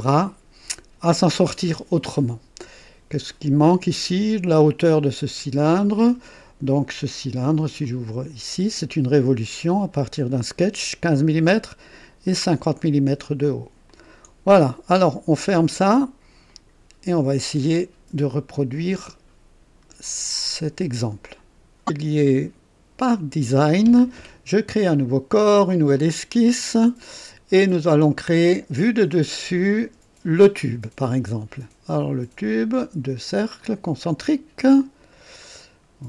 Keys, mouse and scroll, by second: 7.6 click, 13.8 click, 16.5 click, 23.2 click, 24.8 click, 26.0 click, 28.4 click, 29.7 click, 33.6 click, 35.4 click.